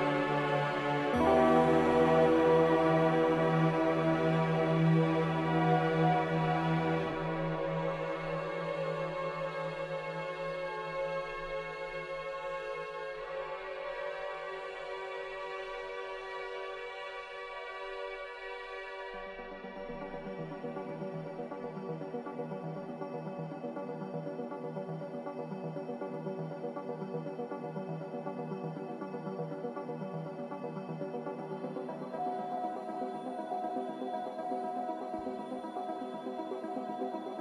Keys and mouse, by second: 0.0 ctrl+r, 6.1 ctrl+z, 7.3 ctrl+r, 15.8 ctrl+r, 25.2 ctrl+r, 33.2 Tab, 34.5-35.2 middle drag, 36.7-37.4 drag.